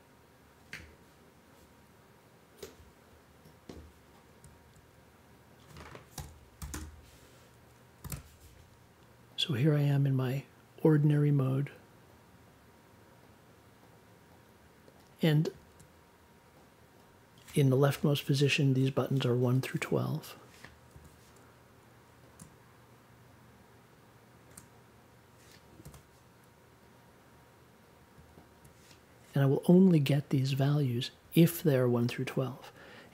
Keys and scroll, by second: 6.1 n, 6.6 -, 6.7 space, 8.0 3, 9.1 5, 20.9 i, 25.8 i.